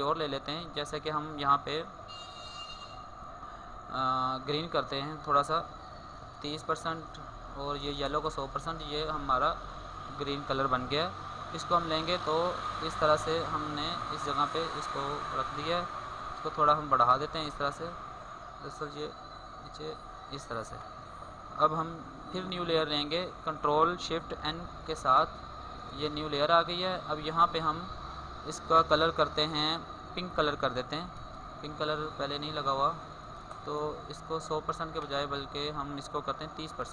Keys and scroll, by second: 10.7 ctrl+t, 15.6 ctrl+t, 24.2 ctrl+shift+n.